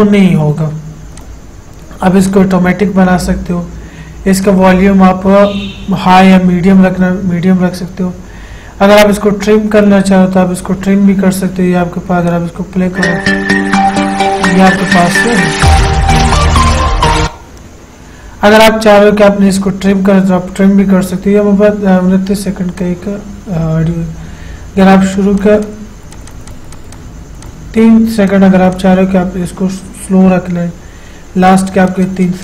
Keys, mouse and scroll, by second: 1.4 click, 4.6 click, 4.7 click, 10.0 click, 12.5 click, 17.4 click, 23.0 click, 25.2 click, 31.7 click.